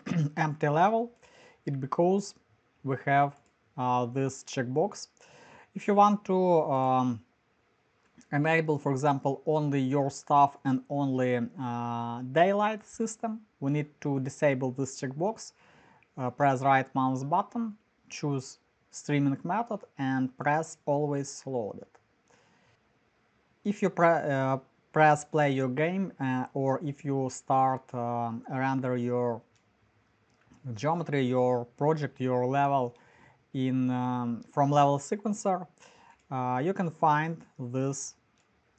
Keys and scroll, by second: 22.7-23.7 typing, 38.5-38.7 typing.